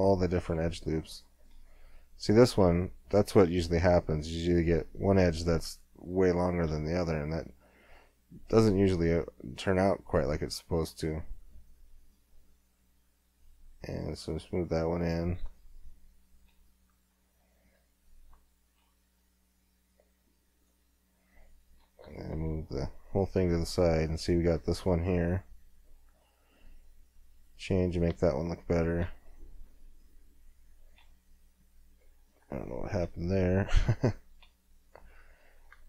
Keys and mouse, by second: 4.9-6.1 middle drag, 6.1-7.9 drag, 6.7 g, 7.9-17.4 middle drag, 19.1 g, 22.0 KP_1, 22.3 KP_3, 24.8 g, 25.9 click, 26.1 middle click, 27.9 click, 31.9 middle click, 35.5 middle click.